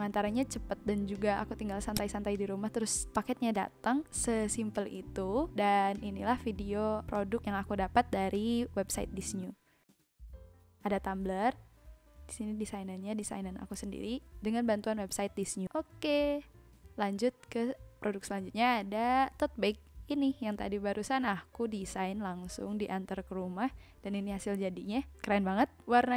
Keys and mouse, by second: 1.9 click.